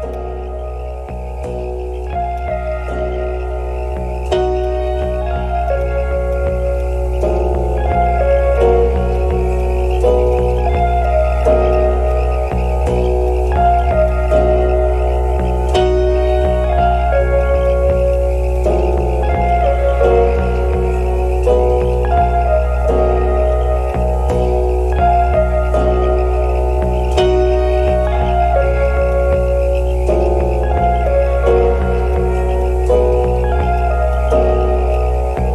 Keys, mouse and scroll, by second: 0.2 alt+click, 1.1 scroll up 1, 2.3 alt+click, 3.5-4.2 alt+scroll up 1, 4.2 scroll down 1, 5.8 double click, 12.7-13.2 scroll down 1, 13.2 right click, 16.2 scroll up 1, 17.6 right click, 21.8-22.3 scroll down 1, 22.4 alt+middle click, 23.1 alt+middle click, 23.9 alt+click, 26.6 alt+middle click, 27.0 scroll up 1, 27.3 alt+middle click, 31.0 right click, 34.1 alt+click, 34.4 alt+middle click, 34.6 alt+scroll up 2.